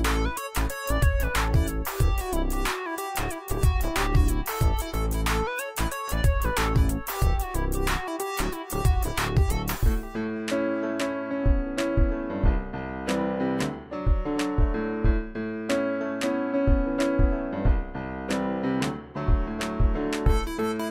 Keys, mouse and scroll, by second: 10.9 click, 15.5 click, 15.9 right click, 16.9 click, 19.2 click, 19.3 shift+click, 20.1-20.9 drag.